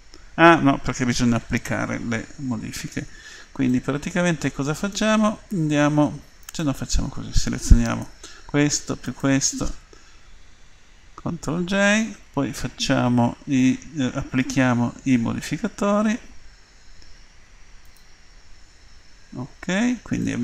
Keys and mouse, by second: 0.1-1.2 drag, 2.7 Tab, 6.4-10.9 right drag, 11.2 ctrl+j, 17.9-19.6 drag, 19.6 Tab.